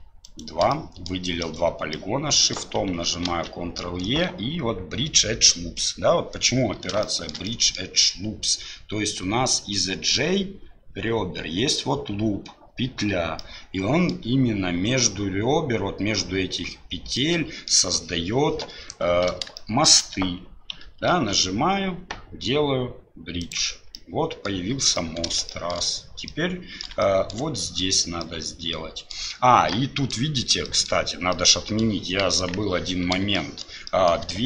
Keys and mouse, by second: 0.7 middle click, 1.9 middle click, 3.2 ctrl+e, 7.0 shift+middle click, 7.4 middle click, 13.4 middle click, 17.2 middle click, 19.6 shift+middle click, 21.1 ctrl+e, 24.0 middle click, 25.0 middle click, 25.5 shift+middle click, 26.3 middle click, 27.1 shift+middle click, 28.3 middle click, 29.8 middle click, 30.6 middle click, 31.3 middle click, 32.3 KP_1, 33.4 shift+middle click, 34.0 shift+middle click.